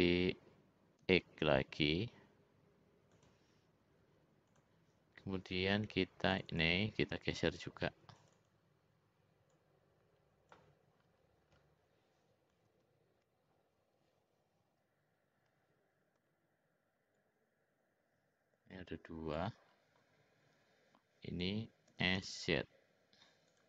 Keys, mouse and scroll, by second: 4.4 click, 6.4 click, 7.3 click, 8.2 click, 9.5-10.6 drag, 12.7 ctrl+z, 14.6 ctrl+z, 16.2 l, 17.2-19.4 drag, 21.9 s.